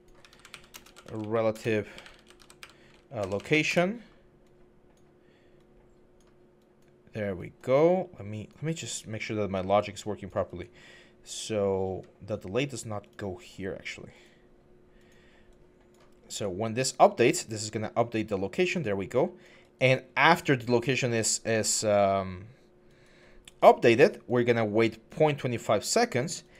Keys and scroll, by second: 0.0-2.4 typing, 3.0 Up, 3.2 Up, 3.3 Up, 3.5 Return.